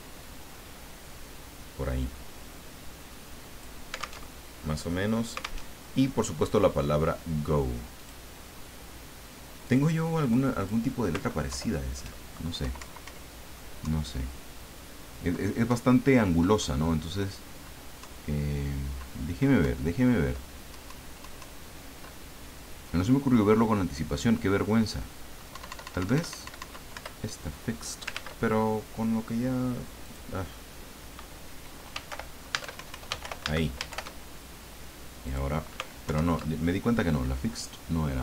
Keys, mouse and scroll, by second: 0.2-3.9 drag, 4.3 alt+Tab, 5.6 alt+Tab, 8.0 click, 9.6 click, 10.2 click, 10.6 click, 11.5 alt+Down, 12.6 Page_Up, 13.8 Down, 19.6 Down, 25.5 Up, 26.9 Return, 28.1 ctrl+z, 30.0 click, 31.7-33.7 typing, 33.9 shift+Home, 35.2 click, 36.0 alt+Down.